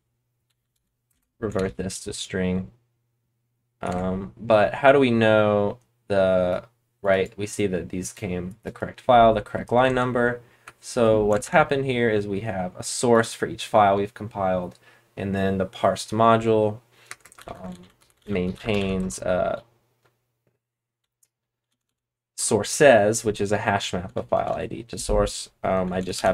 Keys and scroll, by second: 0.4-1.2 typing, 1.5 ctrl+s, 3.8 super+Tab, 9.8 super+Tab, 11.3 ctrl+Tab, 17.0-22.3 typing, 22.3 Return, 23.4-24.4 typing, 25.7-26.3 typing.